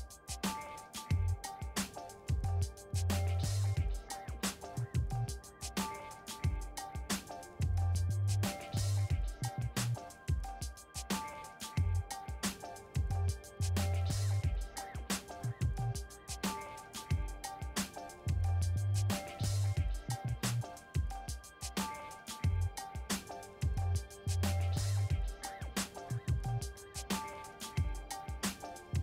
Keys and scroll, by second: 0.9 v, 19.6 2, 21.0 Return.